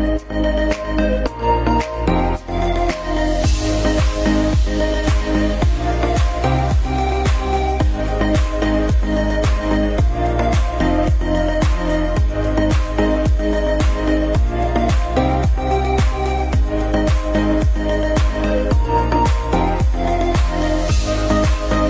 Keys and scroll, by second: 4.3 Delete, 5.5 ctrl+z, 6.2 Up, 7.4 F4, 8.1 Escape, 12.2 c, 13.7 c, 15.9 F3, 16.2 Escape, 17.5 shift+F2, 18.6 F9, 21.6 F3.